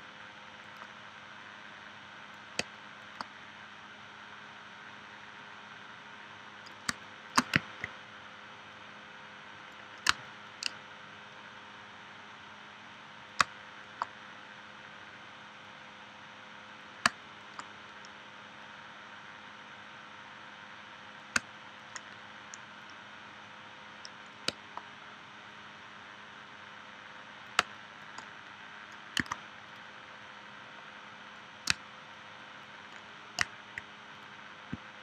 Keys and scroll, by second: 2.6 space, 6.9 space, 10.1 space, 13.4 space, 17.0 space, 21.4 space, 24.5 space, 27.6 space, 29.2 a, 31.7 space.